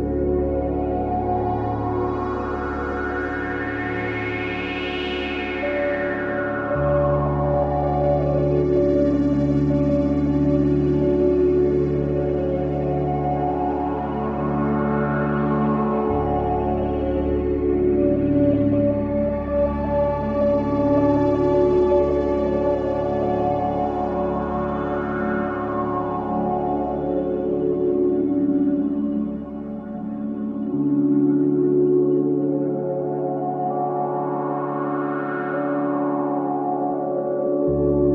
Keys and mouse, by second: 0.2 ctrl+s, 4.0 typing, 5.1 typing, 5.7 ctrl+alt+click, 7.0 click, 8.2 click, 9.5 right click, 10.4 click, 11.1 click, 12.5-13.2 typing, 13.3 Return, 14.9 click, 20.1 click, 21.1 alt+click, 22.2 alt+shift+click, 22.8 alt+click, 24.1-26.5 shift+drag, 27.8-30.3 shift+drag, 31.3 click, 32.8 click, 33.6 click, 34.8 click, 35.1 click, 35.7 click.